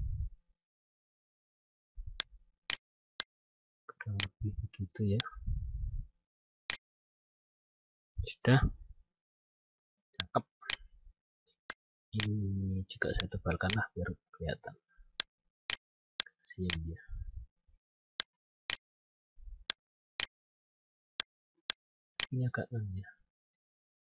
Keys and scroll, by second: 6.9 F9.